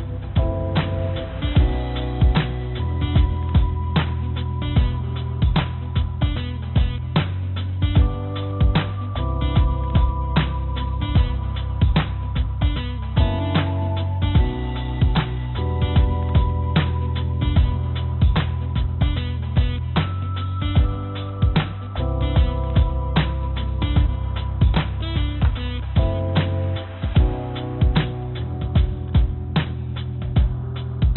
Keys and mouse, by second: 2.6 3, 3.0 click, 3.8 click, 4.3 click, 5.5 e, 8.8-9.9 drag, 10.7 click, 11.2 e, 16.6-17.6 drag, 18.7 click, 19.2 click, 20.0 s, 21.6 click, 22.1 s, 25.7-27.5 drag, 27.8 2, 28.5 click, 29.8 g.